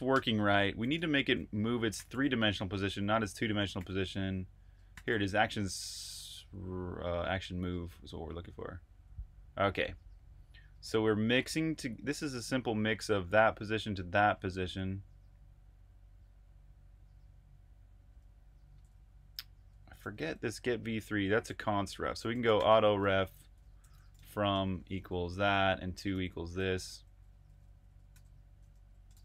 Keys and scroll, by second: 0.0-0.1 typing, 1.6-6.0 typing, 7.2-10.0 typing, 12.0 typing, 18.1-29.2 typing.